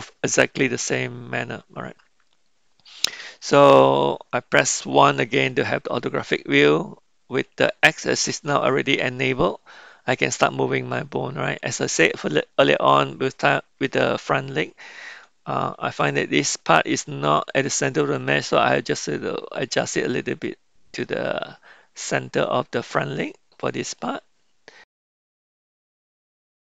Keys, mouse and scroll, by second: 5.2 KP_1, 16.0 r, 25.2 click, 25.9 r.